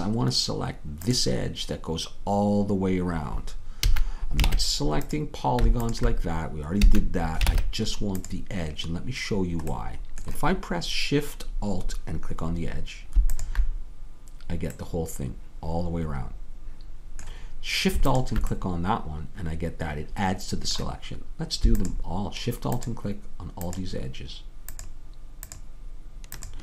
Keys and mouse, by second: 1.2-3.1 drag, 3.9 a, 4.5 ctrl+Tab, 6.5-10.4 drag, 6.8 a, 7.5 ctrl+Tab, 10.4-11.9 middle drag, 13.7-15.1 drag, 15.1 middle click, 15.8 middle click, 18.4-26.6 drag.